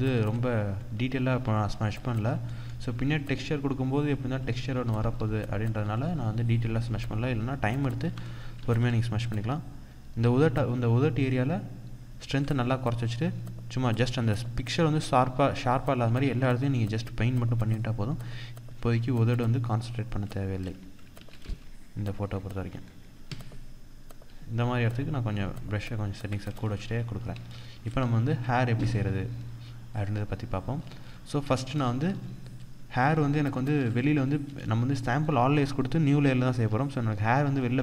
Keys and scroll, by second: 0.8 ctrl+=, 7.6 ctrl+=, 20.7 ctrl+-, 24.6 ctrl+-, 26.9 ctrl+-, 30.2 ctrl+-, 31.2 ctrl+-, 31.5 ctrl+0, 32.8 ctrl+=, 33.4 ctrl+space.